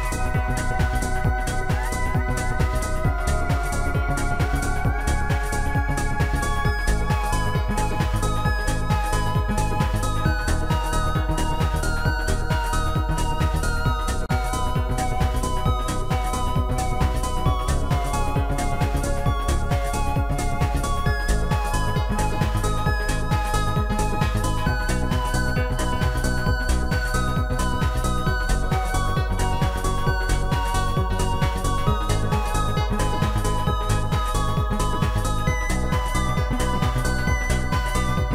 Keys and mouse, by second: 4.9 shift+click, 6.3 click, 8.7 click, 9.1 click, 10.7 shift+click, 13.8 shift+click, 15.2 shift+click, 19.6 shift+click, 20.6 shift+click, 26.6 ctrl+click, 28.4 shift+click, 30.3 shift+click, 35.2 shift+click, 36.2 shift+click.